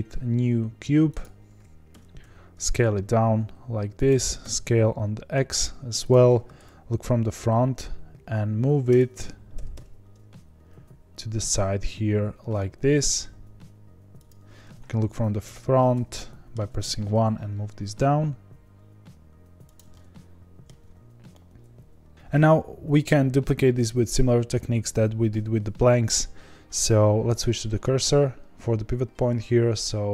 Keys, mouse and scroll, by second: 1.2 shift+a, 1.9 Tab, 2.2 s, 4.2 s, 6.5 KP_7, 8.8 Tab, 9.5 g, 14.9 KP_1, 15.6-16.1 scroll up 4, 16.1-16.5 shift+middle drag, 16.5-17.0 shift+scroll down 1, 17.0 g, 19.9-30.1 middle drag.